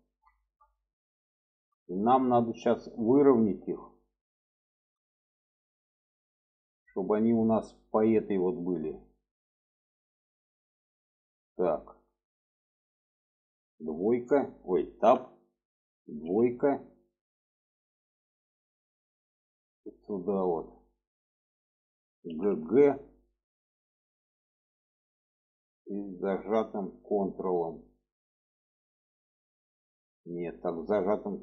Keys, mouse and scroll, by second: 0.1 shift+middle click, 1.5-2.5 middle drag, 3.1 shift+middle click, 4.4 shift+middle click, 6.5 shift+middle click, 8.3 shift+middle drag, 9.8 shift+middle click, 10.8 shift+middle drag, 11.6 shift+middle click, 13.6 2, 14.8 Tab, 16.0 2, 16.6 click, 19.3-20.2 shift+middle drag, 22.1 g.